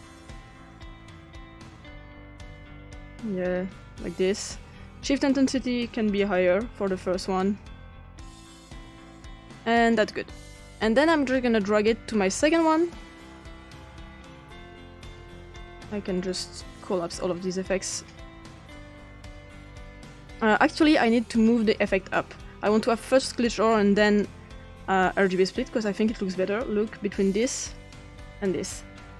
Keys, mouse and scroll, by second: 1.5 click, 2.6 click, 3.6 click, 6.3 click, 7.4 click, 8.3 click, 11.1-13.0 drag, 13.6 click, 16.2 click, 16.8 click, 17.7 click, 21.7 click, 24.0 click, 27.6 click.